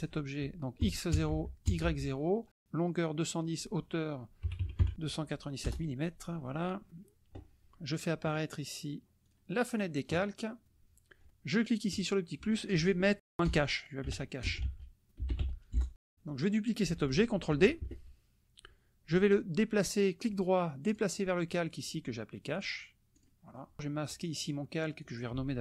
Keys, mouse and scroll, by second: 1.1 KP_0, 1.3 Tab, 1.6 KP_0, 1.8 Tab, 3.0 KP_1, 3.1 KP_0, 3.3 Tab, 4.4 KP_2, 4.8 KP_7, 5.6 Return, 9.3 click, 9.7 click, 11.9 click, 13.2-15.8 typing, 16.4 click, 17.8 ctrl+d, 19.1 click, 20.9 click, 22.5 click, 23.1 click, 24.4 click, 25.0 click.